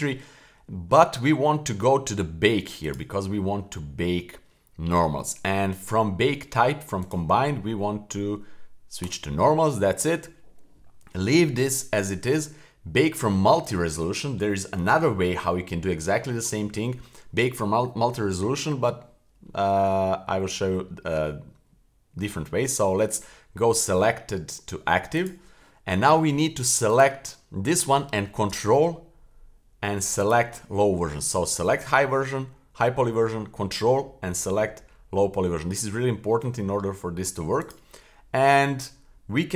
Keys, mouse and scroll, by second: 0.2-2.2 scroll down 8, 2.8 click, 3.4-4.9 scroll down 6, 4.9-5.9 scroll down 2, 7.0-9.1 drag, 9.8 scroll down 2, 25.2 click, 26.9 click, 30.2 super+click, 37.6 click.